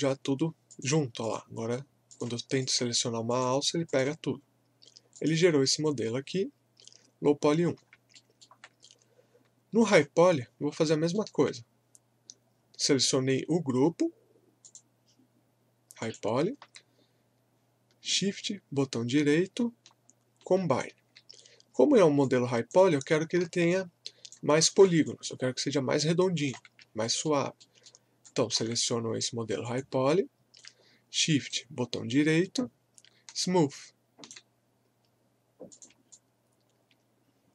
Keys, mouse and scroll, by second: 0.7 click, 7.8 scroll down 1, 8.1 alt+middle click, 9.8 click, 10.5 scroll up 1, 10.8 alt+middle click, 14.7 click, 18.2-21.8 shift+right drag, 21.8 scroll down 1, 22.2 alt+click, 23.2 scroll up 1, 23.7 alt+click, 24.7 scroll down 1, 25.1-26.7 alt+drag, 26.7 alt+scroll up 1, 27.0 alt+middle click, 28.3 alt+click, 31.5-35.7 shift+right drag, 35.7 click, 36.1-37.5 alt+drag.